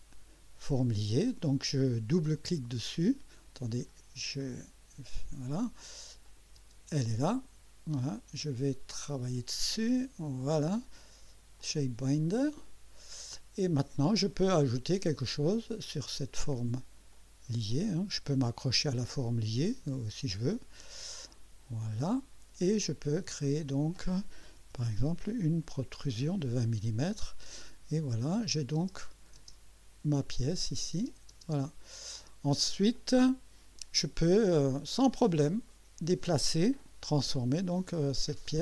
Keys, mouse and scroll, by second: 2.3 click, 3.9 click, 4.4 click, 6.2 click, 6.6 space, 9.9 click, 11.6 click, 12.5 click, 13.4 scroll up 1, 15.5 click, 17.1 click, 18.3 click, 21.0 click, 23.4 click, 24.6 2, 24.9 0, 25.9 Return, 28.3 click, 28.8 space, 30.1 click, 30.9 space, 32.9-34.0 drag, 35.7 right click, 36.8 click, 38.5-38.6 drag.